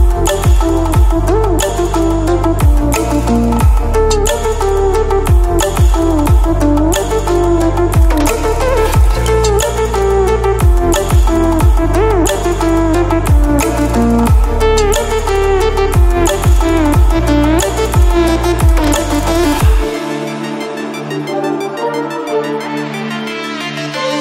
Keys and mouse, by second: 4.2 right click, 6.2 click, 8.9 click, 13.6 click, 15.6 ctrl+z, 17.7 click, 18.5 ctrl+z, 19.7 click.